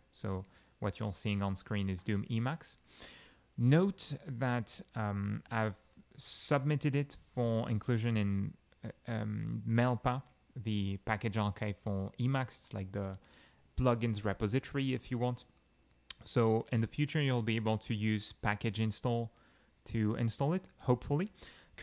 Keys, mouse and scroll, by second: 0.5 Down, 2.0 click, 4.5 alt+x, 5.0 alt+p, 5.1 alt+a, 5.3 alt+c, 5.4 alt+k, 5.5 alt+a, 7.4-8.7 typing, 18.7 Return, 21.6-21.8 typing.